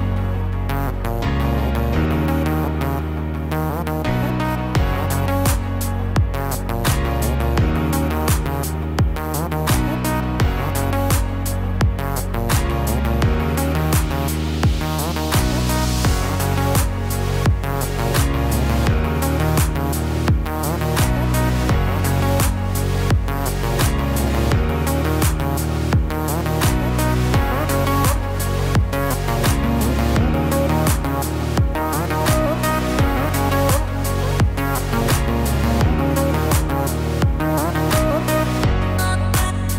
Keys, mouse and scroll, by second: 0.6 shift+click, 2.4 s, 16.6 click, 18.1 s, 22.5 Tab, 24.3-24.9 scroll up 1, 24.9-25.6 scroll down 1, 25.8 click, 27.4 click, 31.5 click, 32.4 click, 34.4 click, 37.1 click.